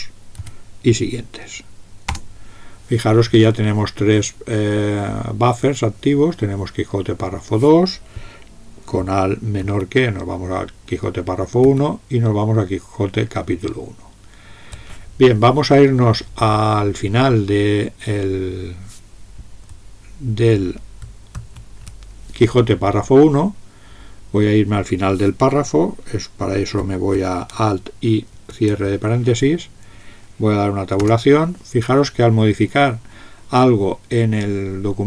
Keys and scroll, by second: 0.3 Tab, 2.1 Return, 9.6 alt+<, 11.6 alt+<, 21.3 alt+>, 28.3 alt+), 31.0 Return.